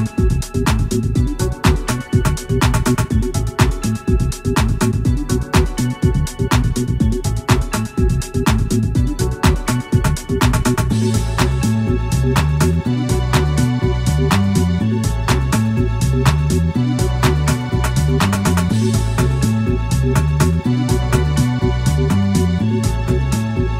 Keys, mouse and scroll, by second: 0.1 x, 1.2 click, 2.0 scroll down 1, 2.5 scroll up 1, 2.9-3.9 shift+middle drag, 10.3-11.9 drag, 12.9 F12, 16.3 shift+F3, 17.5-17.9 shift+scroll down 2, 18.1-18.9 shift+middle drag, 18.9-19.5 shift+scroll up 4, 19.8 shift+middle click, 20.3 shift+scroll up 2, 21.8 shift+a, 23.4 shift+click.